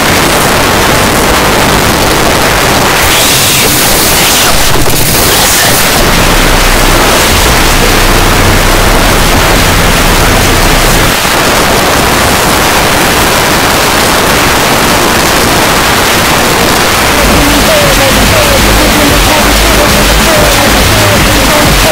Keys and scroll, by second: 11.1 Page_Down.